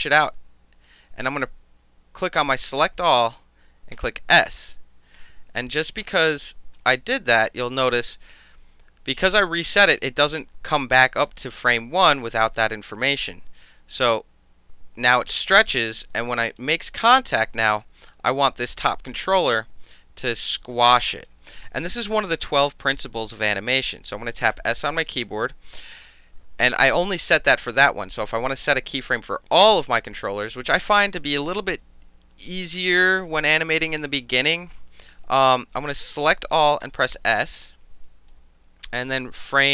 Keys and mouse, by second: 3.1 click, 3.9 s, 6.0-6.8 drag, 7.1 alt+right drag, 7.8 alt+right click, 13.6-16.6 drag, 17.0 alt+right click, 17.6 alt+right drag, 19.1 click, 20.2-21.3 drag, 24.5 s, 35.8 click, 36.8 s, 38.3-39.7 drag.